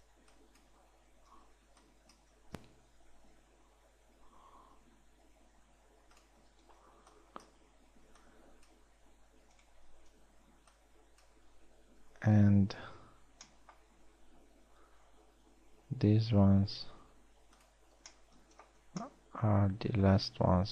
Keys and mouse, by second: 0.5 a, 0.9 b, 2.3 b, 3.8 s, 7.1 a, 7.5 b, 8.7 s, 9.7 s, 11.0 b, 13.6 b, 16.5 s, 18.5 a, 19.4 z.